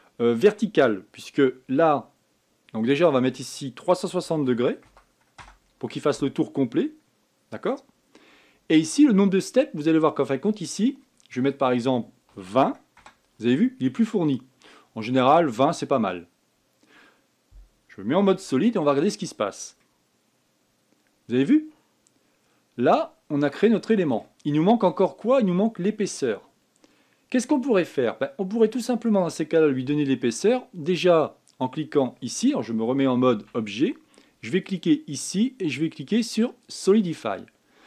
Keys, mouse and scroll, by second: 4.2-6.9 drag, 6.9-9.1 middle drag, 9.1-9.8 scroll up 1, 9.8-12.3 scroll up 4, 12.3-15.3 drag, 16.3 scroll down 4, 19.2 z, 20.6-23.6 middle drag, 25.0-25.3 scroll up 3, 25.6-28.7 middle drag, 29.9 scroll up 1, 30.1 scroll down 4, 34.1 Tab, 35.4-37.8 drag.